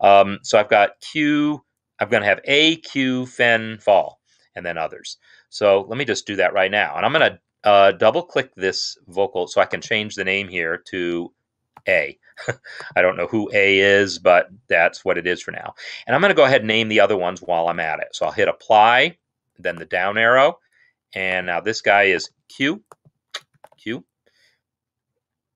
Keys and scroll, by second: 10.2 ctrl+a, 11.9 shift+a, 13.3 ctrl+a, 21.7 ctrl+a, 22.3 shift+q, 23.3 ctrl+a, 23.7 shift+q.